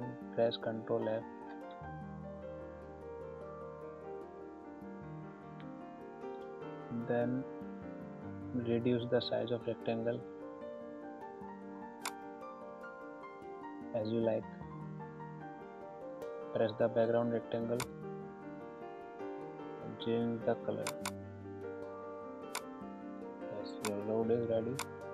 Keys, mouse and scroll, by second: 0.1 ctrl+c, 3.3 ctrl+f, 12.0-17.7 alt+drag, 20.8-25.1 drag.